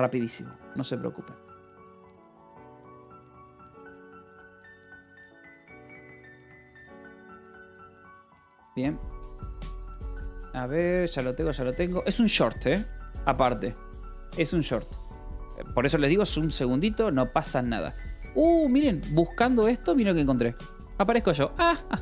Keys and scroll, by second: 2.6-8.6 typing.